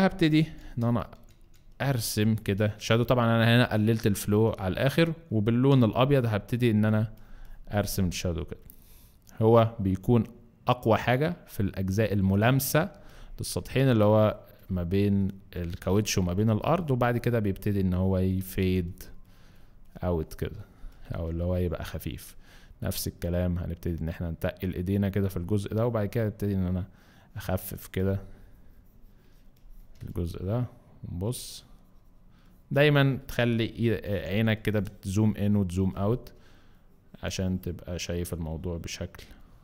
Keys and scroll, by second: 0.4 ], 0.7 ], 1.1 ], 1.4 ], 5.9 x, 13.0 space, 20.9 space, 30.1 z, 34.1 ], 34.3 ], 35.7 space.